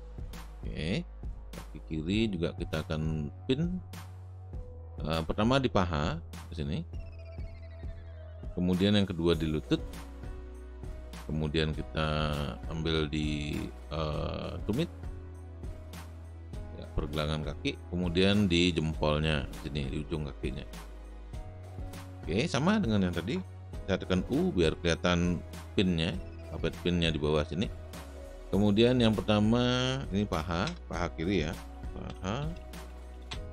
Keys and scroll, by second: 1.5 space, 25.6 u, 30.7 Return, 31.4-33.5 typing.